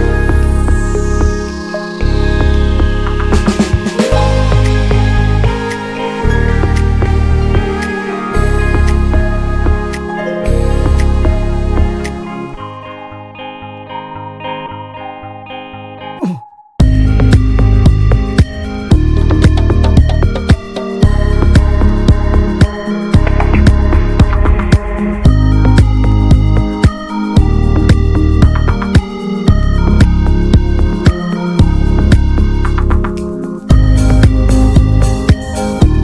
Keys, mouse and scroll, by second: 2.0-2.8 scroll up 3, 2.8-5.6 drag, 5.6 scroll down 3, 5.9-6.9 shift+middle drag, 6.9-7.2 scroll down 1, 7.2 middle click, 7.4 ctrl+shift+drag, 7.8 drag, 8.0-8.3 middle drag, 8.3-9.6 drag, 9.6 ctrl+s, 10.2-10.5 scroll up 2, 10.5-13.0 drag, 13.0-13.6 scroll down 3, 13.6-14.3 middle drag, 14.3-15.5 ctrl+shift+right drag, 15.5-16.0 middle drag, 16.0-17.6 ctrl+shift+drag, 17.6-18.0 middle drag, 18.0-24.2 drag, 24.2-24.8 scroll down 5, 24.8-26.1 drag, 26.1 middle click, 26.7 ctrl+click, 27.2 shift+d, 28.0-28.7 scroll up 4, 28.7-32.9 drag, 34.2 click, 34.9-35.5 middle drag, 35.5-36.0 ctrl+shift+right drag.